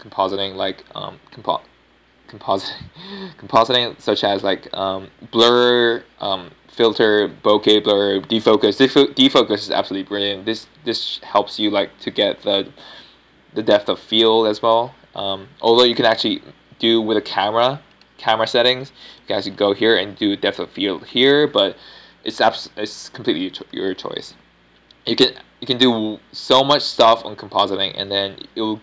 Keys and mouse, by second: 19.1-28.8 drag.